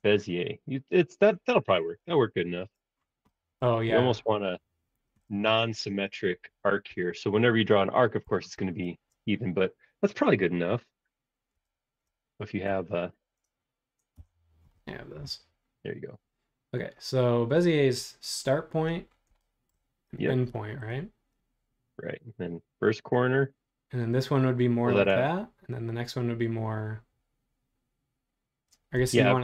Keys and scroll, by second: 0.0 space, 1.2 super+z, 1.8 super+z, 2.4 super+z, 6.9 shift+super+z, 7.0 shift+super+z, 7.7 shift+super+z, 8.2 super+z, 8.6 super+z, 11.5-13.5 typing, 14.1 Return.